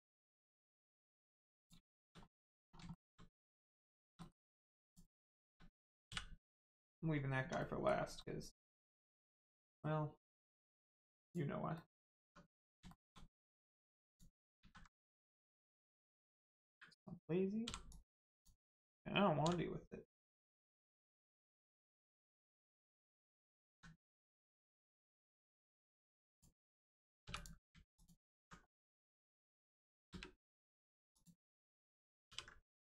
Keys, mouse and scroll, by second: 0.3-0.6 scroll down 1, 0.7 middle click, 1.0 scroll up 1, 1.5 click, 1.8 shift+middle click, 2.3 middle click, 2.3 middle click, 2.6 scroll down 1, 2.9 shift+middle click, 3.4 scroll up 1, 3.9 shift+middle click, 4.1 middle click, 4.8 click, 5.2 shift+middle click, 6.4 middle click, 7.1 scroll down 1, 7.3 Tab, 7.5 middle click, 9.2 Tab, 9.6 middle click, 10.1 scroll down 1, 10.5 middle click, 11.1 click, 11.7 middle click, 12.1 Tab, 12.5 middle click, 12.8 shift+middle click, 14.0 middle click, 14.1 click, 14.5 alt+z, 17.8 click, 19.3 x, 20.6 click, 21.2 middle click, 23.6 alt+z, 24.3 middle click, 24.7-25.0 scroll down 1, 25.0 middle click, 26.2 click, 27.9 alt+click, 28.7 middle click, 28.7 middle click, 30.0 space, 31.1 click, 32.2 ctrl+e.